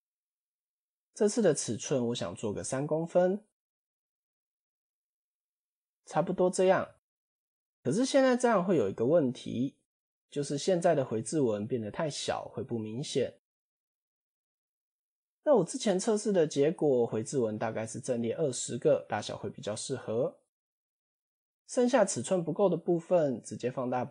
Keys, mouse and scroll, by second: 0.5 click, 0.9 click, 1.1 click, 1.3 click, 1.5 click, 1.7 click, 1.9 click, 2.1 click, 2.3 click, 2.4 click, 2.7 click, 2.8 click, 3.0 click, 3.2 click, 3.6 click, 3.8 click, 4.0 click, 4.3 click, 4.8 click, 5.3 click, 6.8 scroll down 4, 7.3-7.7 shift+middle drag, 8.6-9.1 scroll up 4, 9.3-9.8 shift+middle drag, 13.9 scroll down 4, 14.9-15.3 shift+middle drag, 16.9-18.9 drag, 19.7-20.1 scroll up 4, 20.1-20.8 shift+middle drag.